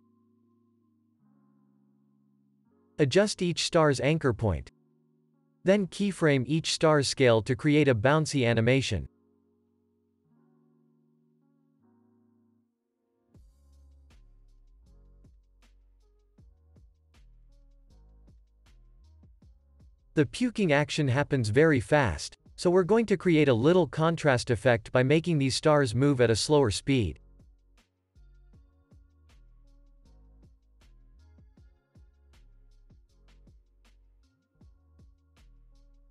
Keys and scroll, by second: 0.4 ctrl+a, 2.6 s, 3.2 ctrl+s, 6.0 ctrl+s, 9.1 =, 15.7 8, 16.0 Return, 16.8 ctrl+s, 17.9 F9, 19.0 space, 26.2 space, 31.8 ctrl+s.